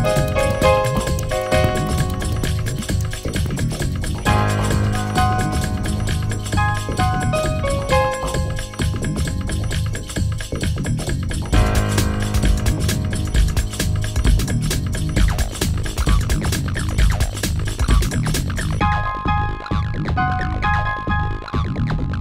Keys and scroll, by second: 0.7 space, 10.0 space, 13.4 space, 14.8 space.